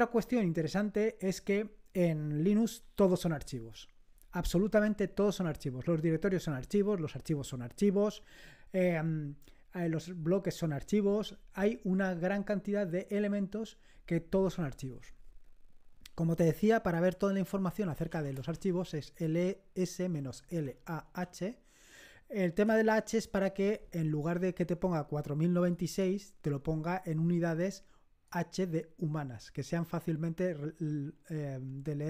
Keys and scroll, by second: 17.7-21.5 typing, 22.7 Return.